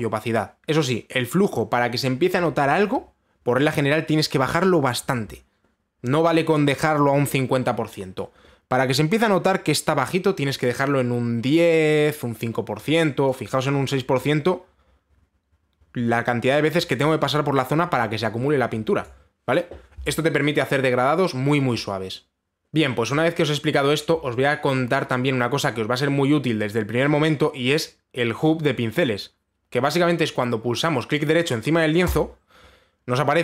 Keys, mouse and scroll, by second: 3.4 click, 5.5 click, 7.6 click, 10.6 click, 13.4-22.6 drag, 32.8 right click.